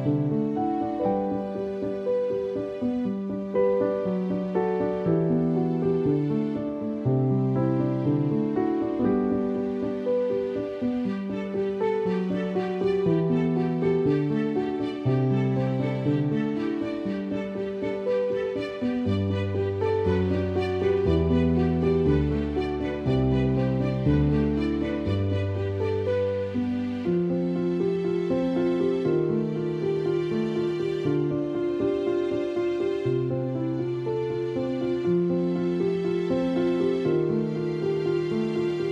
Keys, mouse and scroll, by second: 0.0-3.9 typing, 7.2 space, 10.7-11.9 typing, 13.9 click, 14.3 space, 14.6 click, 14.7 space, 16.0 ctrl+-, 17.2 click, 17.7 ctrl+=, 18.3 click, 19.5 ctrl+=, 20.9 click, 23.0-26.9 typing, 23.2 click, 25.1 ctrl+=, 26.8 click, 27.7 alt+click, 29.3 alt+click, 30.2 alt+click, 32.3 alt+click, 33.2 alt+click, 34.0 alt+click, 35.6 alt+click, 36.7 alt+click, 37.8 space, 37.9 click, 38.1 space.